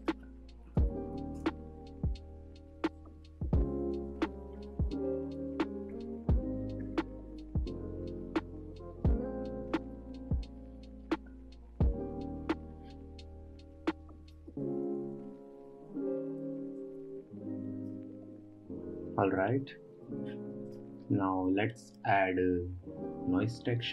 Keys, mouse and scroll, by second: 0.5-6.5 drag, 9.6-12.6 shift+drag, 17.3-19.5 drag, 19.5-20.0 scroll up 2, 20.0-21.2 middle drag, 21.2 click, 21.7 scroll down 1, 22.0-23.1 middle drag, 23.1-23.9 scroll down 5.